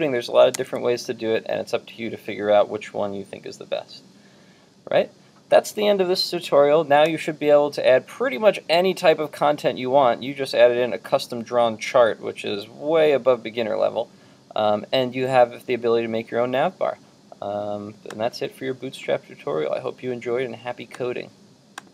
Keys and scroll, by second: 0.6 super+Tab.